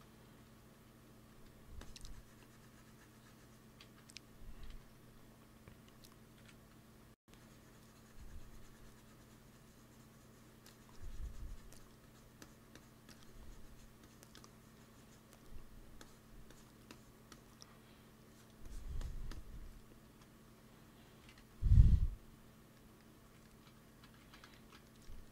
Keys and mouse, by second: 0.4 middle click, 0.6 t, 1.0 f, 1.7-3.5 drag, 3.8 ctrl+z, 4.6 t, 5.4-8.9 drag, 6.8 t, 11.9-21.2 drag, 19.6 middle click, 20.0 middle click, 21.2 alt+m, 22.6 middle click, 22.9 click, 24.1 shift+c.